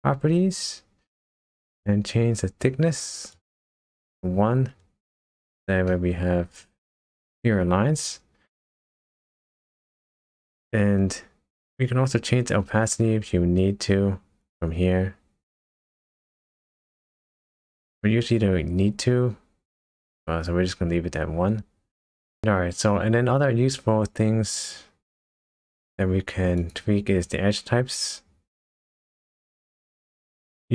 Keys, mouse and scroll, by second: 3.3 click, 5.4 click, 5.9 middle click, 7.1-7.8 scroll up 2, 14.6 click, 26.6 click.